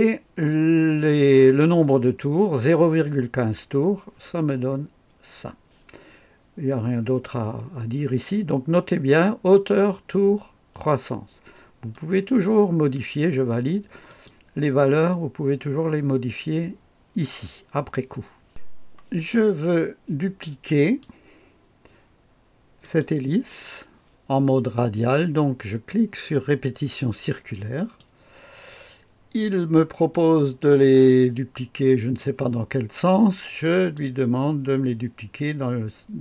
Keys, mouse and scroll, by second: 11.9 click, 14.0 click, 15.1 scroll down 2, 18.4 click, 20.8 click, 22.8 click, 27.7 click, 30.1-32.2 drag, 33.7 click.